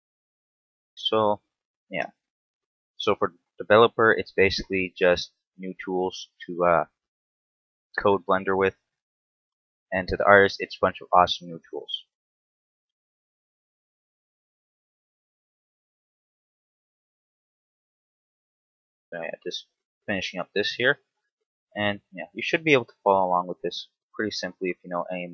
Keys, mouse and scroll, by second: 0.0 scroll down 2, 0.3 shift+middle click, 1.2 right click, 1.5 scroll up 2, 2.0 shift+middle click, 2.4 Tab, 3.1 a, 4.2 shift+middle click, 4.6 shift+a, 6.9 n, 7.9 n, 8.2 t, 9.2 click, 12.1 t, 13.1 g, 14.2 click, 14.4 s, 16.5 ctrl+click, 17.3 KP_3, 18.3 s, 19.8 ctrl+click, 20.4 KP_7, 21.1 z, 22.1 z, 22.8 s.